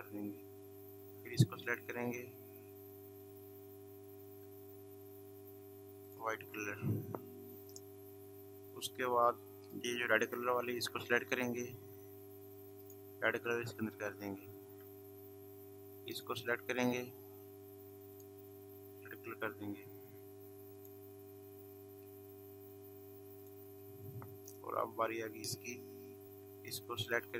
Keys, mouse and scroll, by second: 0.4 v, 1.3 click, 4.3 i, 6.1 click, 8.0 v, 9.6 click, 12.8 click, 14.5 v, 16.1 click, 17.6 i, 18.1 click, 19.3 click, 22.6 i, 23.4 click, 26.3 v, 26.7 click.